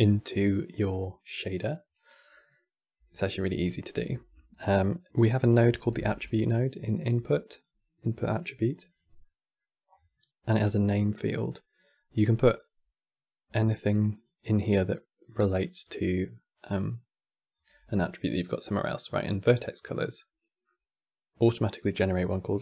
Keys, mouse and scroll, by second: 2.5-3.4 scroll down 4, 3.4-4.0 shift+middle drag, 4.0 scroll down 1, 4.2-5.6 shift+middle drag, 5.6 shift+a, 8.9-9.6 middle drag, 9.6-10.1 scroll up 6, 11.2-12.3 drag, 13.8 click, 14.9 click, 15.2 click, 15.4 click, 15.7-17.3 drag, 17.8-22.2 drag.